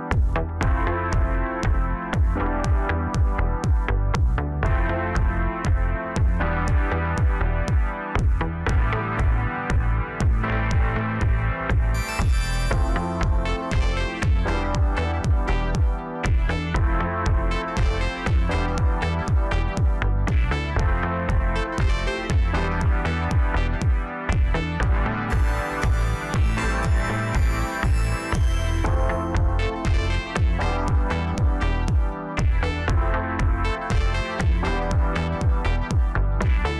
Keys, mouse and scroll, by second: 0.0-0.5 middle drag, 0.5 scroll down 3, 0.8-1.7 middle drag, 1.7-2.2 scroll up 2, 3.3 click, 4.6-8.2 drag, 8.2-8.8 scroll down 4, 8.9-9.4 middle drag, 9.4-9.8 scroll up 2, 9.8-11.3 middle drag, 11.3-11.8 scroll up 3, 11.8-12.9 middle drag, 12.9 click, 13.7 scroll down 1, 13.9-16.9 middle drag, 17.0-17.5 scroll down 3, 17.5-18.6 middle drag, 18.6 click, 19.8-21.0 drag, 21.0-23.1 middle drag, 23.1-23.9 drag, 23.9-25.5 middle drag, 25.5 shift+b, 27.3 scroll down 3, 27.6-29.6 middle drag, 29.6-31.0 scroll down 12, 31.2 ctrl+KP_2, 31.4 ctrl+KP_2, 32.0 KP_3, 33.3 ctrl+KP_2, 33.8 ctrl+KP_2, 33.9 ctrl+KP_2, 34.6 shift+b.